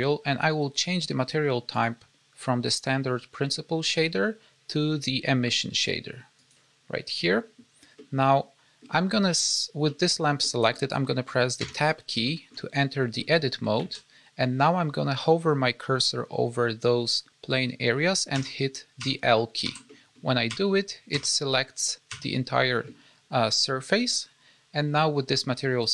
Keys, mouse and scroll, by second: 1.6 click, 7.9 middle click, 9.8 middle click, 10.3 middle click, 11.6 Tab, 12.2 shift+middle click, 13.1 middle click, 13.7 alt+a, 18.3-22.0 typing, 19.8 middle click.